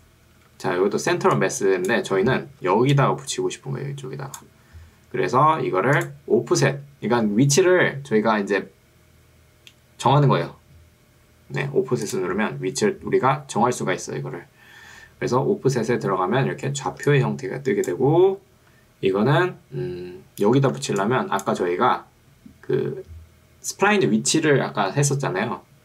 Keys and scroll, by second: 0.4 Escape, 1.2 ctrl+2, 2.2 Escape, 2.8 ctrl+2, 4.8 Escape, 17.0 ctrl+2, 18.4 Escape, 20.8 ctrl+2, 21.8 Escape.